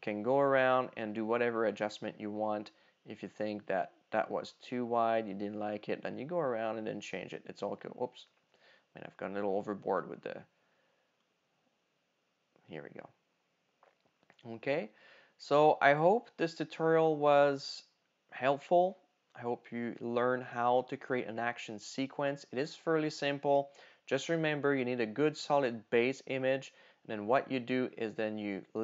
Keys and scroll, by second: 8.3 super+z.